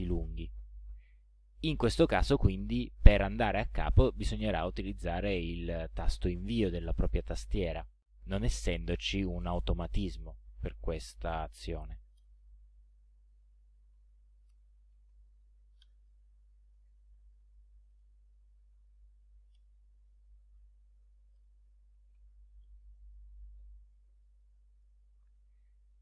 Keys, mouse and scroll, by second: 12.2 Return, 13.2-22.7 typing, 15.8 Return, 19.6 Return, 24.4 click, 25.3 ctrl+scroll down 2, 25.9 ctrl+click.